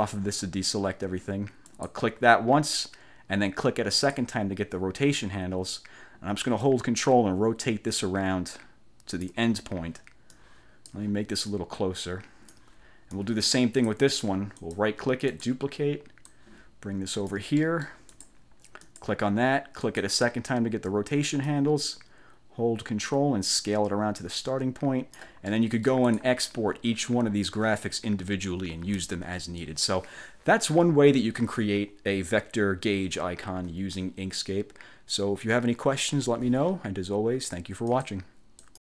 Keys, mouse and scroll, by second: 1.8 click, 4.0 click, 6.7-9.5 ctrl+drag, 10.4 click, 11.6 ctrl+click, 13.3 click, 14.7 click, 15.4 click, 16.4 ctrl+click, 18.5 ctrl+click, 19.0 click, 20.0 click, 21.6-25.5 ctrl+drag, 25.8 click, 38.0 click, 38.7 click.